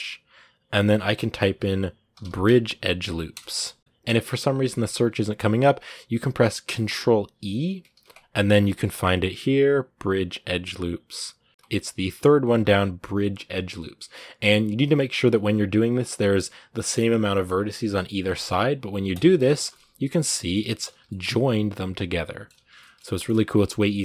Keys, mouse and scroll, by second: 19.3-20.7 shift+middle drag, 20.7 z, 20.9-22.4 middle drag, 22.4 z, 22.6-24.0 middle drag.